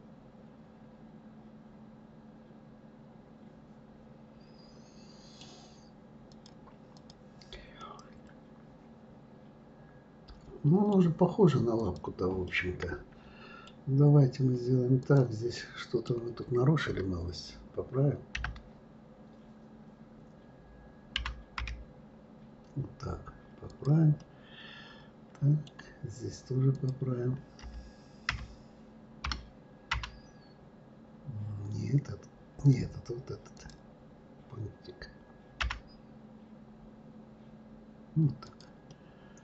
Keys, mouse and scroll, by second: 6.3-7.8 drag, 7.8-10.8 middle drag, 11.8 click, 12.4-15.0 middle drag, 15.0 click, 15.5-18.3 middle drag, 18.3 d, 24.2-26.7 middle drag, 26.7 click, 27.6 z, 33.5 click, 35.6 g, 38.9-39.4 middle drag.